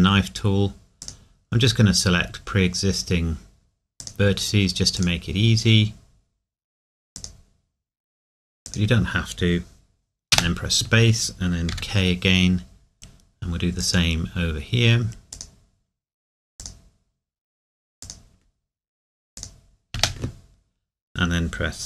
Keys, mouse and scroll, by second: 1.0 click, 4.0 click, 11.7 k.